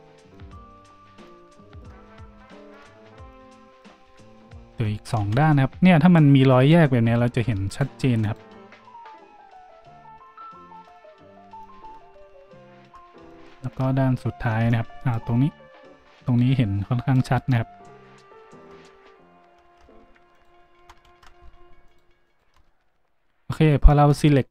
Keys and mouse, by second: 4.0 z, 5.1 z, 7.6 alt+shift+middle click, 8.2 alt+shift+middle click, 13.2-18.9 shift+drag, 18.9 z, 19.6 z, 20.3 alt+shift+middle click, 21.1 ctrl+z, 21.8 alt+shift+middle click, 22.2 alt+shift+middle click.